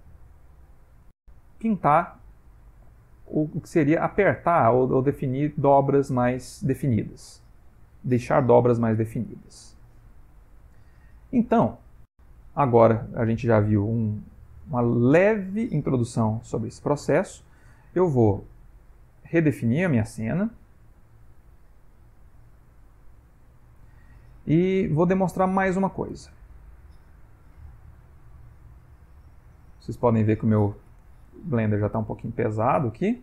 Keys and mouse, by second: 6.7 click, 10.1 click, 10.6 middle click, 11.3 middle click, 12.9 ctrl+middle click, 14.0 middle click, 15.6 middle click, 19.2 click.